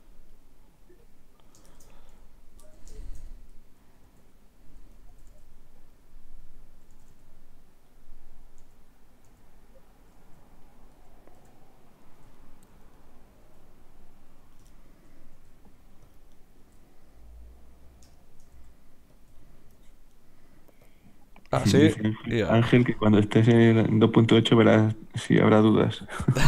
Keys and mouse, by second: 0.9 right click, 1.7 click, 1.7-2.7 middle drag, 1.7 right click, 2.7 click, 2.7 right click, 2.9 middle click, 3.6-5.8 drag, 4.1 r, 5.1 r, 6.4-8.6 drag, 6.9 r, 8.6 r, 11.0 click, 11.4 g, 15.4 g, 16.6 r, 18.5 g, 19.4 middle click, 20.1-21.4 right drag, 20.8 click, 20.8 middle click, 25.0-26.3 middle drag, 26.3 right click.